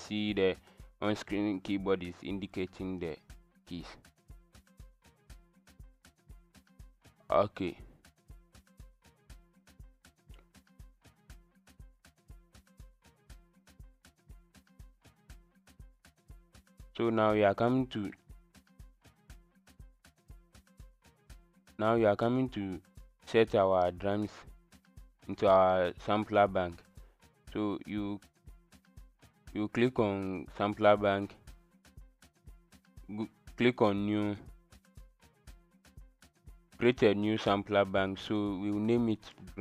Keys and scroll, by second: 15.8 KP_Subtract, 16.0 Return, 16.2 KP_Add, 16.4 KP_Multiply.